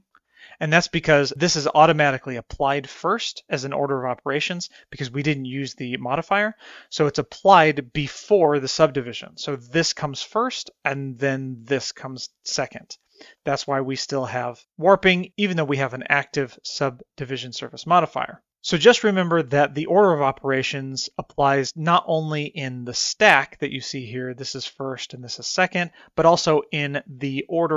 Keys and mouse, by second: 0.3 middle click, 10.4 click, 13.5 middle click, 22.5 click, 23.0 drag.